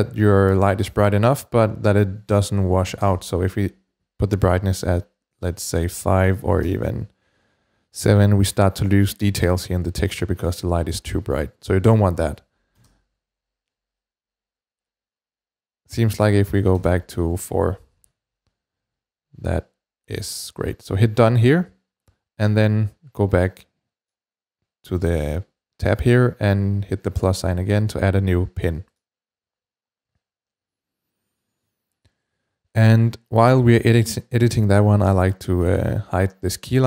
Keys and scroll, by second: 2.7 5, 2.8 Return, 6.3 typing, 6.4 Return, 12.7 Return, 12.7 typing, 16.6 4, 16.7 Return.